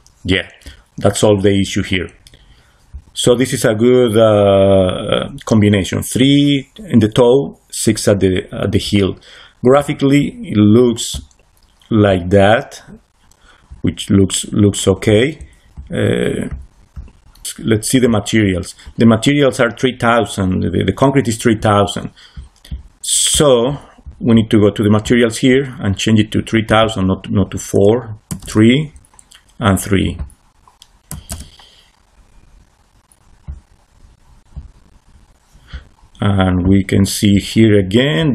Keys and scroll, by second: 28.2 3, 28.3 Return, 31.0 3, 31.2 Return.